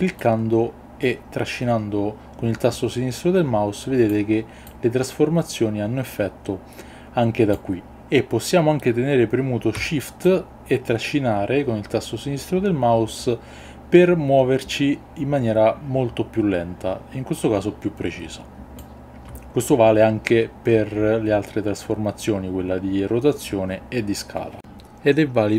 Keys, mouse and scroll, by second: 0.2-4.1 drag, 4.6-7.5 drag, 10.2-18.8 shift+drag.